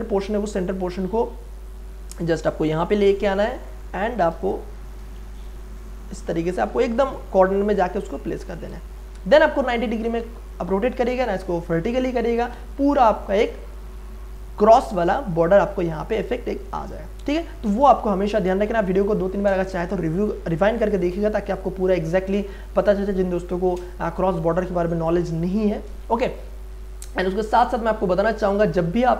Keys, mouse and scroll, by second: 2.3 alt+click, 2.8 space, 2.9 click, 3.3 space, 3.6 ctrl+click, 5.8-7.1 drag, 7.1 space, 7.3-9.0 ctrl+drag, 9.0 right click, 10.0 click, 11.1 right click, 11.8 click, 13.0 Return, 14.1 space, 14.4 ctrl+click, 15.4 click, 16.1-18.5 ctrl+drag, 18.5 space, 18.8-21.6 ctrl+drag, 21.6 space, 21.8 click, 22.1 space, 22.8-26.0 ctrl+drag, 26.0 space, 26.3 click, 26.3 ctrl+click, 27.7 click, 28.5-29.1 ctrl+drag.